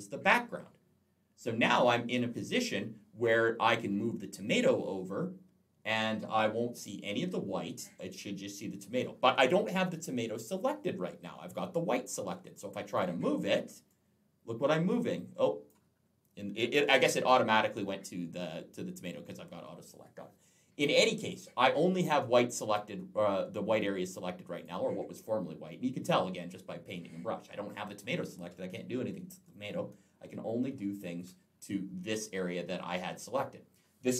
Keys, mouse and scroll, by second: 12.8 click, 13.7 click, 16.6 ctrl+z, 24.4 click, 25.5 click, 27.5 click, 30.0 ctrl+z.